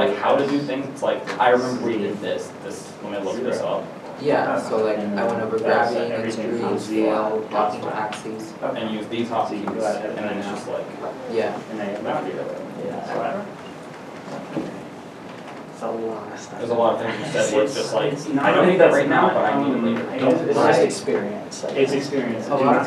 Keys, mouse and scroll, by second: 2.8 click, 4.3-5.8 scroll down 1, 13.2 Down, 19.4-20.0 scroll up 1, 20.0 middle click, 21.5 shift+middle click.